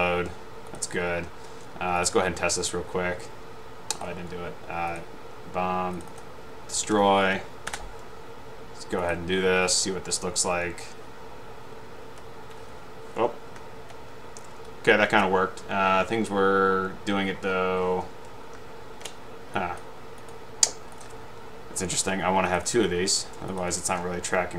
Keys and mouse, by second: 5.0 click, 6.2 click, 6.7-7.4 typing, 9.1-9.5 drag, 12.0 Right, 12.3 Up, 12.4-13.3 typing, 13.7 Up, 13.7 Left, 14.2 Right, 14.7 Left, 15.2 Right, 18.6 Left, 18.9 Up, 19.7 click, 22.8 right click, 23.6 click, 23.8 right click.